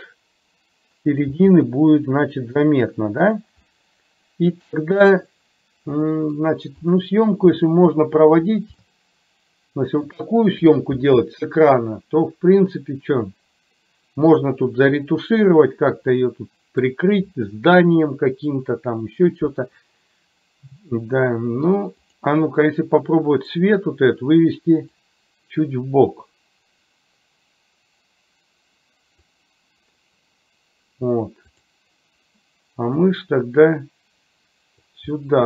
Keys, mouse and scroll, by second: 0.0-1.1 middle drag, 1.4 g, 3.9-5.1 middle drag, 5.1 scroll down 1, 6.1 middle click, 7.0 click, 8.9-10.1 shift+middle drag, 16.3-17.0 middle drag, 22.0 click, 22.9-23.6 middle drag, 25.0-29.4 drag, 31.6 click, 33.0-35.0 drag, 35.3-35.4 middle drag.